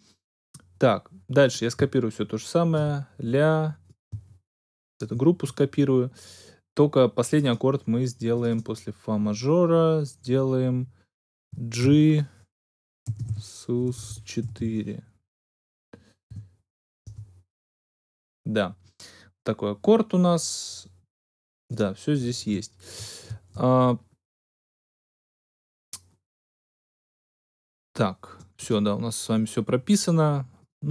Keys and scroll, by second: 11.7 shift+g, 12.8-15.0 typing, 16.2 4, 17.0 Return.